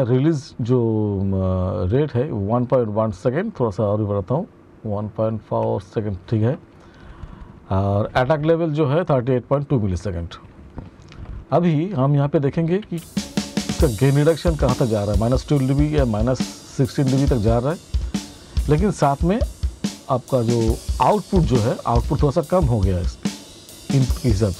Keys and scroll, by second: 12.3 space.